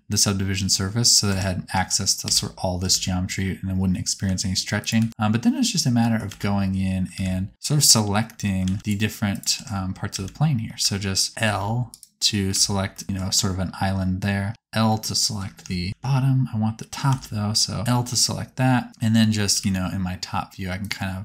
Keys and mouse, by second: 1.3 Tab, 1.7 alt+z, 2.2 Tab, 2.8 alt+z, 4.2 s, 4.9 g, 6.2 alt+z, 7.1 alt+a, 8.6 alt+z, 8.8 Tab, 8.8 click, 9.6 Tab, 10.0 alt+z, 10.7 alt+a, 11.4 k, 12.5 l, 14.4 l, 15.9 ctrl+z, 17.0 alt+z, 17.9 l, 19.4 KP_7.